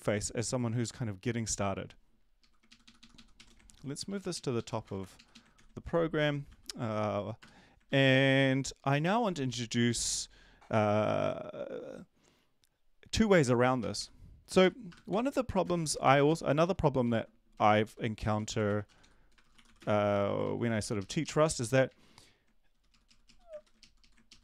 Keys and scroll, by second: 2.7 shift+Up, 2.8 shift+Up, 3.0 shift+Up, 3.4 shift+Right, 3.7 ctrl+x, 4.0 BackSpace, 4.1 BackSpace, 4.3 Up, 4.5 Up, 4.8 Return, 5.0 Return, 5.2 Up, 5.5 Up, 6.5 ctrl+s, 7.9 ctrl+s, 13.9 Right, 16.1 typing, 17.8 ctrl+Left, 18.0-20.1 typing, 20.4 ctrl+Right, 20.8 ctrl+shift+Left, 20.9 ctrl+shift+Left, 21.2 ctrl+shift+Left, 23.0 ctrl+shift+Right, 23.5 shift+Right, 23.5 Down, 24.3 Left.